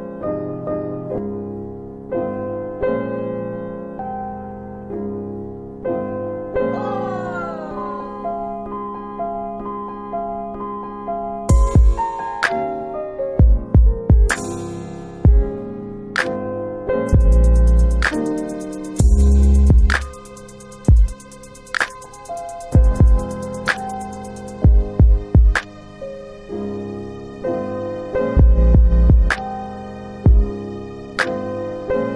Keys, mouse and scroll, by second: 6.6-7.3 typing, 9.3 click, 25.4 alt+click, 26.1 alt+middle click, 26.3 alt+middle click, 26.3-26.7 alt+scroll down 2, 27.4 click, 27.4 scroll up 1.